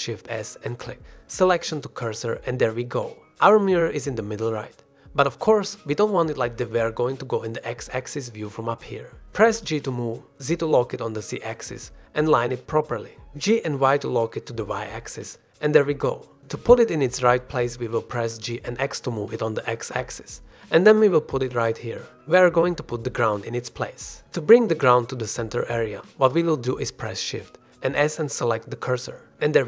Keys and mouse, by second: 0.3 shift+s, 1.1 shift+s, 3.0-3.3 shift+middle drag, 3.4-3.8 middle drag, 4.3-4.7 middle drag, 5.3 f, 5.6-6.9 middle drag, 8.7 click, 10.8 shift+click, 12.3 g, 13.3 z, 13.8 x, 15.5 g, 15.9 y, 18.4 g, 18.7 x, 22.2-22.5 drag, 23.5-23.8 drag, 24.0 g, 24.4 click, 27.4 shift+s, 28.4 shift+s.